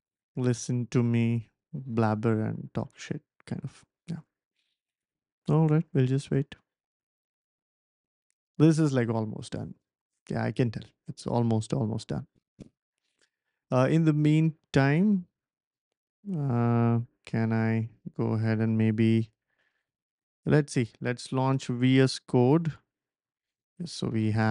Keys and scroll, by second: 22.0-23.3 typing.